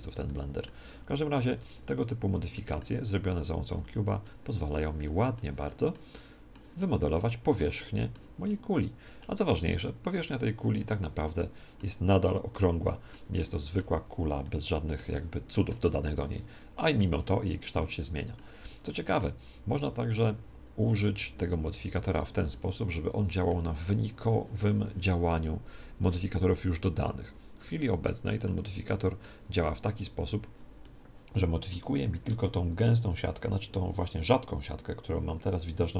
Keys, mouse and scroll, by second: 0.2-2.7 middle drag, 1.5 Tab, 2.2 Tab, 3.3 click, 3.7 z, 5.1 middle click, 5.3-9.5 middle drag, 9.5 right click, 10.1 Tab, 10.7-16.7 middle drag, 16.3 Tab, 16.9-18.6 middle drag, 20.2 middle click, 21.6-23.8 right drag, 22.5-24.3 middle drag, 27.8-30.7 middle drag, 30.8-32.6 middle drag, 31.8 Tab.